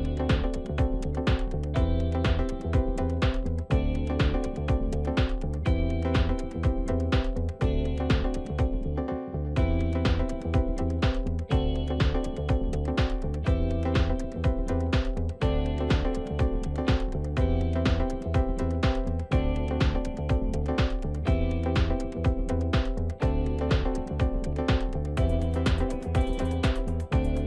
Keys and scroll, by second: 1.8 ctrl+t.